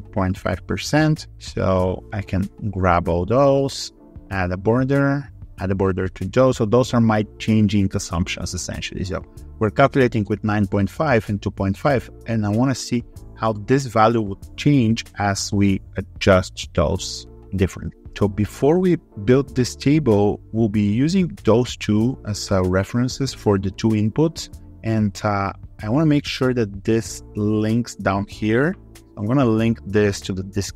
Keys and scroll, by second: 1.4 ctrl+Right.